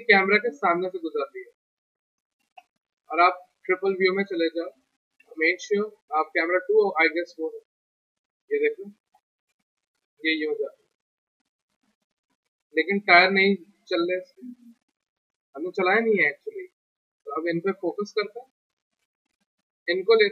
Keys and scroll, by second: 5.2 c, 17.8 z.